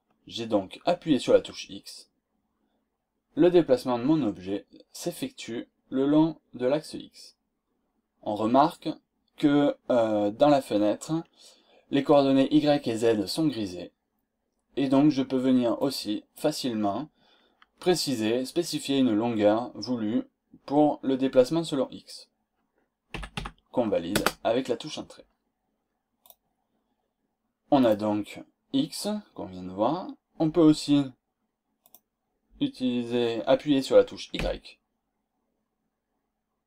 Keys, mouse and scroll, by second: 15.8 click, 23.1 KP_1, 23.4 KP_2, 24.1 Return, 26.2 click, 27.7 click, 31.8 click, 34.4 z.